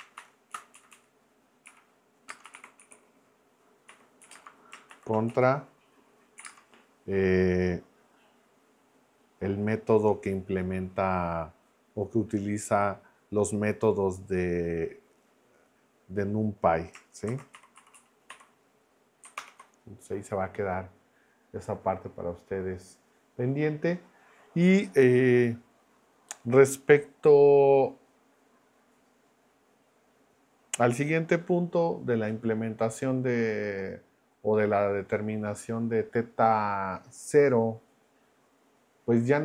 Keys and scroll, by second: 0.2 shift+;, 0.5 Right, 1.1 Right, 1.7-5.3 typing, 6.4 ., 6.4 space, 17.0-18.8 typing, 19.4 ctrl+Return.